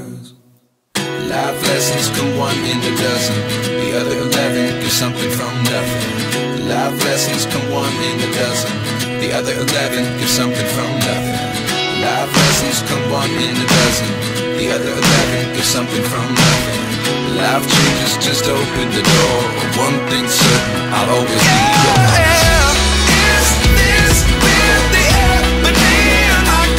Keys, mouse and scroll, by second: 1.8-3.5 typing, 7.5-8.5 typing, 7.7 double click, 9.3 double click, 20.8-24.4 ctrl+alt+shift+drag, 21.6 e.